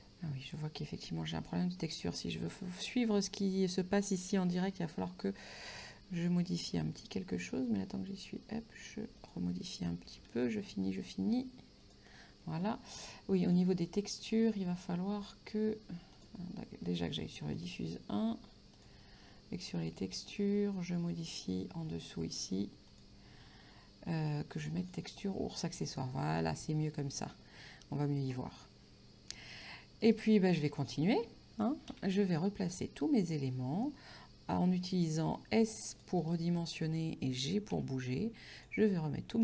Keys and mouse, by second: 1.4 click, 6.7 s, 9.3 shift+click, 10.1 g, 11.9 shift+click, 13.5 click, 16.2 click, 17.6 click, 18.8 click, 23.0 click, 24.9 click, 26.5 middle click, 29.4 middle click, 30.1 right click, 32.0 c, 32.4 click, 36.3 right click, 36.6 middle click, 37.8 g, 38.6 click.